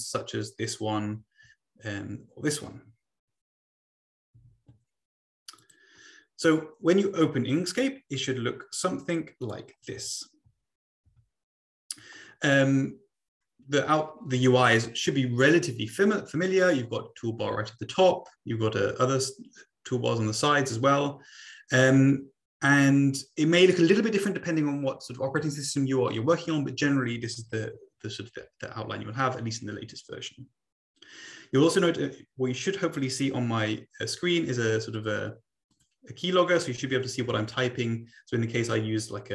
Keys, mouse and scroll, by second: 1.2 BackSpace, 7.0-7.5 scroll up 2, 9.4 click, 9.8 Right, 10.0 Right, 10.5 Right, 11.0 Right, 13.4-14.5 scroll down 2, 21.9-22.4 scroll down 2, 22.4-28.0 scroll up 2, 29.0-29.8 scroll down 2, 35.0 click, 35.7 click, 36.6 click, 37.0-37.5 typing.